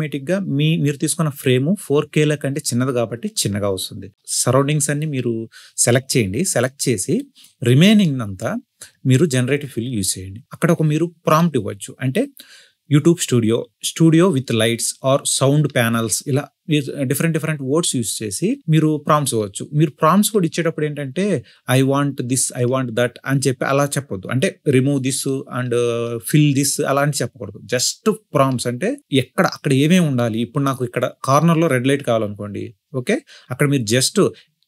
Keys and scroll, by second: 2.9 ctrl+shift+i, 4.6 ctrl+shift+i, 6.5-7.5 typing, 12.9 e, 13.0 space, 13.2 space, 15.1 Delete, 16.3-17.5 typing, 18.0 ctrl+z, 18.5 ctrl+z.